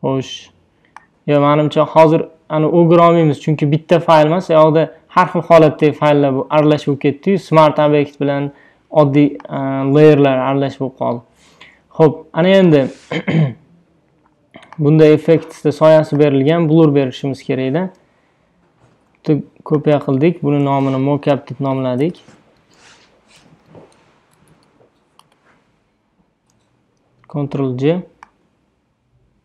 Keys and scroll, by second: 18.9 super+g, 20.9-24.7 typing, 25.3 Return, 27.1 super+j.